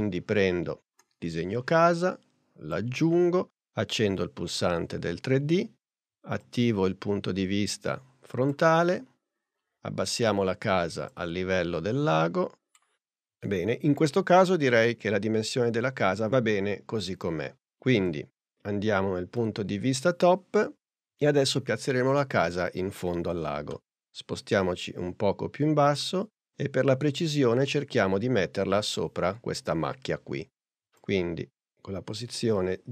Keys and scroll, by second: 9.6 p.